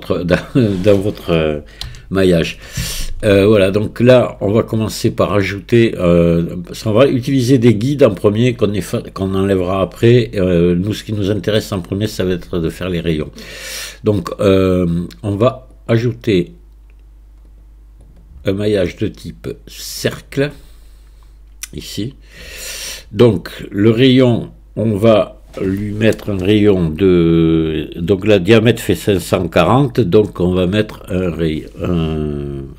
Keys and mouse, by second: 1.9 n, 15.9-18.1 drag, 18.3-20.0 drag, 25.1-32.7 drag.